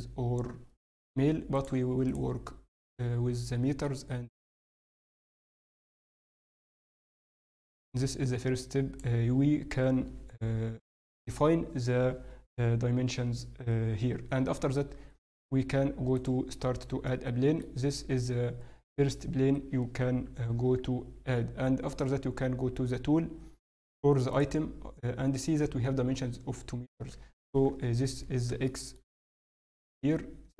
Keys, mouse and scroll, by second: 1.5 click, 7.5 click, 17.0 middle click, 17.9 s, 20.6 n, 22.0 click, 27.6 KP_7, 28.6 shift+middle click, 29.1 scroll, 29.4 shift+middle click.